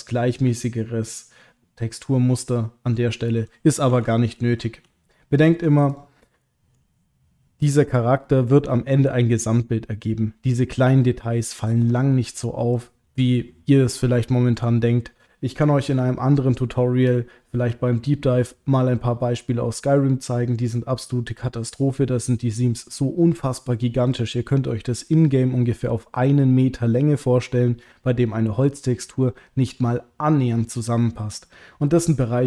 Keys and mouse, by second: 4.3 ctrl+z, 4.9 ctrl+z, 5.9 click, 6.4 middle click, 11.8 click.